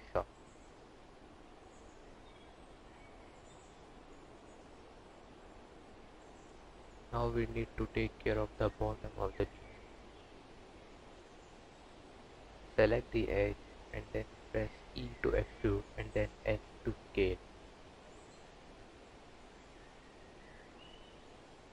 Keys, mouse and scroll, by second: 0.9 click, 4.4 scroll up 2, 5.4 click, 6.1 click, 6.4 Tab, 7.1 2, 7.6 alt+click, 10.2 e, 12.5 g, 15.2 click, 15.8 g, 19.8 e.